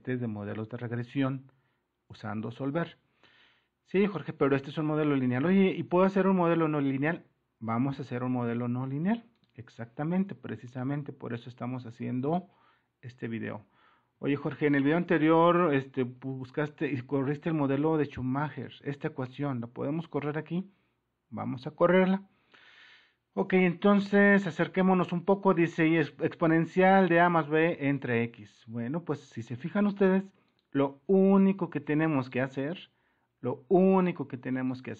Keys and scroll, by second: 14.2-16.6 typing, 28.6 super+-, 30.5 super+-.